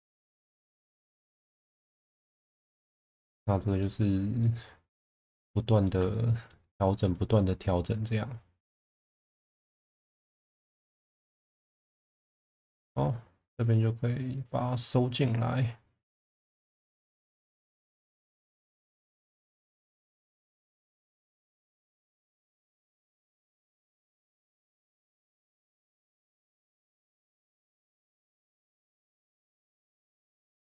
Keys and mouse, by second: 0.4 click, 1.2 click, 2.0 click, 2.9 shift+middle drag, 3.3 middle click, 4.4-5.8 middle drag, 6.1 middle click, 10.0 middle click, 11.0 shift+middle click, 11.8 click, 12.3 click, 13.6 click, 14.3 click, 16.4 click, 16.9 click, 19.6 click, 20.5 click, 22.8 click, 23.6 click, 24.3 shift+middle click, 25.3 click, 26.2 click, 26.8 click, 28.3 click, 29.6 click, 30.4 click.